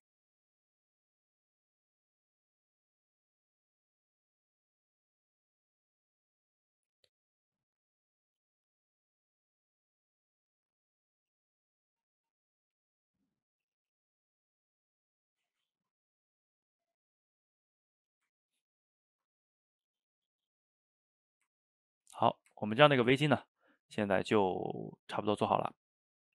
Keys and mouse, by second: 1.1 click, 2.0 middle click, 2.9 click, 3.6-4.8 middle drag, 4.8-5.9 drag, 5.9-7.4 middle drag, 7.4-9.2 drag, 9.2-10.3 middle drag, 10.3-12.3 drag, 12.3-14.3 middle drag, 14.3-17.2 drag, 17.2 middle click, 17.9 click, 18.4-19.7 ctrl+middle drag, 19.7 click, 20.6-24.7 middle drag, 24.7 click, 25.7 middle click.